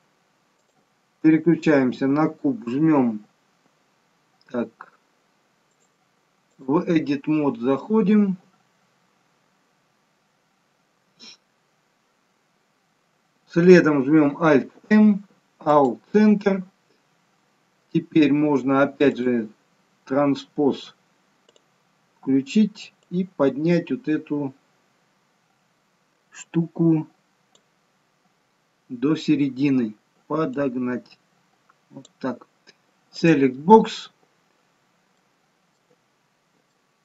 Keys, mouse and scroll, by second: 0.5 click, 5.6 click, 14.5 alt+m, 16.7-17.5 scroll up 3, 19.1 click, 21.4 click, 22.9 click, 30.4 click, 33.1 click, 35.0 alt+middle click, 36.6 shift+middle click.